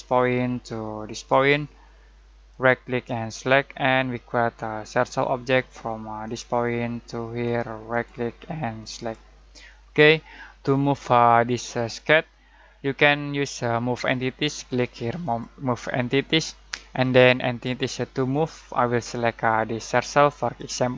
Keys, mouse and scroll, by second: 2.5 right click, 3.3 click, 7.9 right click, 8.9 click, 15.2 click, 18.3-20.7 drag.